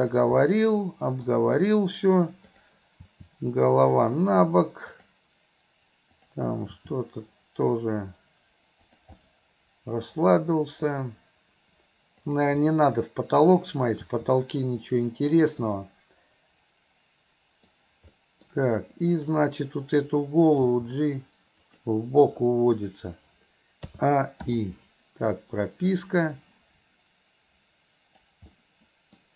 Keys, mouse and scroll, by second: 2.5 click, 5.0 click, 6.2 click, 12.3 click, 12.7-13.4 middle drag, 19.2 click, 26.0-28.4 drag, 28.6-29.2 middle drag.